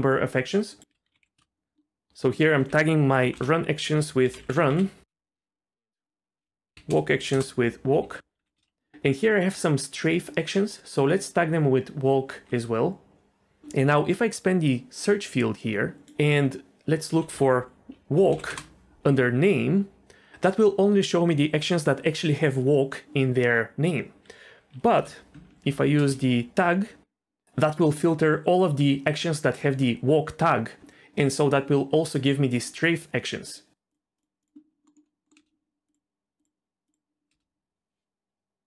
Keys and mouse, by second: 0.8 click, 2.4-5.1 drag, 4.1 BackSpace, 4.2 BackSpace, 5.7 click, 6.1-7.3 drag, 8.0 ctrl+c, 8.4 ctrl+v, 8.6 ctrl+v, 11.3 ctrl+v, 12.3 ctrl+v, 15.0 click, 16.1-18.5 drag, 25.0 BackSpace, 25.9 ctrl+v, 34.8 middle click, 35.3 middle click, 35.4 space, 35.9 click.